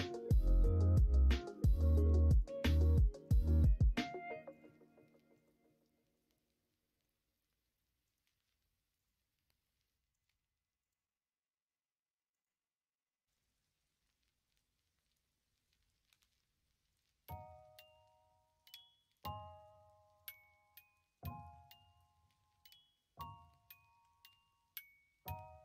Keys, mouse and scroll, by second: 0.4 click, 2.3 click, 4.6 click, 6.4 middle click, 8.0-9.0 drag, 10.0 click, 12.4 click, 16.8 click, 17.8 middle click, 18.7 Tab, 19.8 Tab, 20.1 click, 20.7 middle click, 21.4 Tab, 22.2 a, 23.4 g.